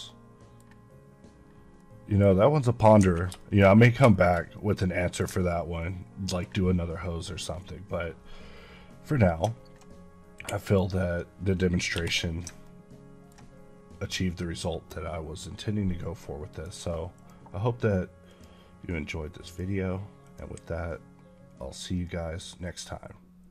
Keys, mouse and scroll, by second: 1.4 scroll down 1, 1.7 middle click, 2.3 scroll down 1, 2.5 middle click, 3.0 a, 3.3 shift+middle click, 3.5 middle click, 3.6 scroll up 1, 4.0 shift+middle click, 4.6 middle click, 5.7 ctrl+middle click, 10.6 click, 11.8 n, 12.5 ctrl+middle click, 16.4 click, 17.0 click, 19.8 click, 21.3 click.